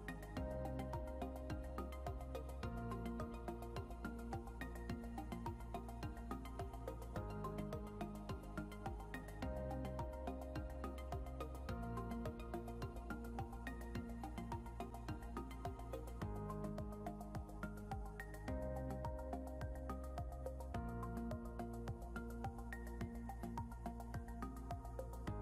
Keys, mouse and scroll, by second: 3.3 scroll down 1, 4.0 click, 6.1 scroll up 1, 6.7 click, 9.4 scroll down 1, 10.5 scroll up 1, 12.1 click, 12.8 shift+click, 13.8 scroll up 1, 14.3 click, 15.6 shift+click, 18.3 scroll down 1, 18.9 click, 20.9 scroll down 1, 21.4 click, 22.4 scroll up 1, 23.0 click, 24.5 scroll down 1.